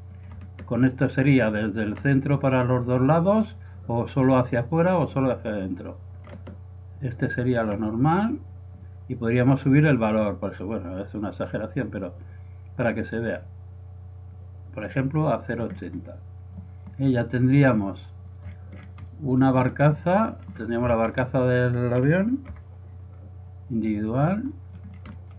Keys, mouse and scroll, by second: 0.2-1.7 drag, 4.1-5.8 drag, 9.3-11.2 drag, 15.3-17.6 middle drag, 17.7 middle click, 18.0 middle click, 18.3 middle click, 18.6 middle click, 20.8 z, 21.1 z, 22.6 g.